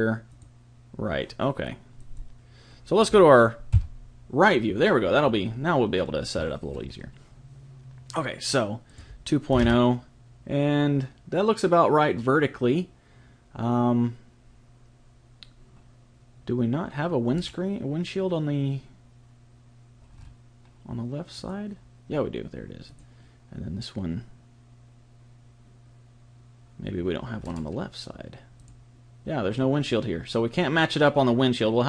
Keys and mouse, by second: 3.7 KP_3, 6.7-8.8 middle drag, 8.8 click, 17.3-21.4 middle drag, 21.4-24.7 drag, 27.4-28.6 middle drag, 28.6 click.